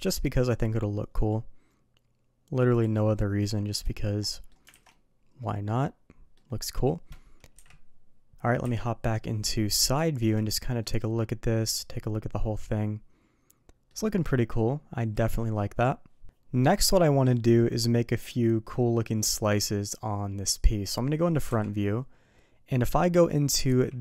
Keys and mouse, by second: 0.7-2.9 middle drag, 3.0-3.8 middle drag, 4.2 middle drag, 4.7 alt+a, 4.9-6.3 middle drag, 6.7 middle drag, 7.5 KP_2, 8.6 KP_3, 10.0 shift+middle drag, 10.8-13.9 middle drag, 15.1 KP_3, 16.7-20.9 middle drag, 21.5 KP_1, 23.6 d.